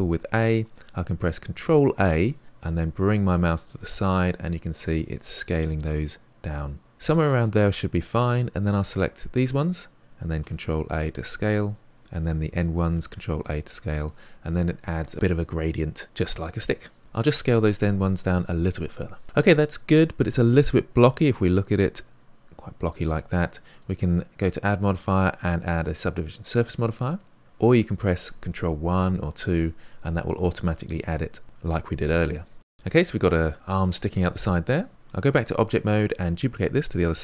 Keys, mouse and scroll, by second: 1.5 ctrl+a, 8.3-10.4 drag, 10.4 ctrl+a, 12.2 click, 13.0 ctrl+a, 17.5 ctrl+a, 20.1 middle click, 20.7-21.3 scroll up 3, 21.3-23.7 middle drag, 27.4-30.2 middle drag, 32.6-33.9 middle drag, 35.2 Tab.